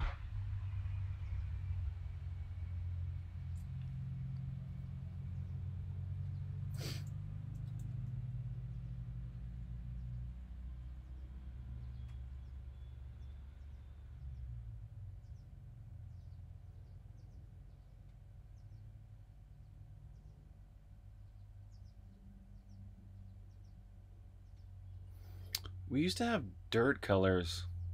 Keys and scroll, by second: 6.7-8.1 typing.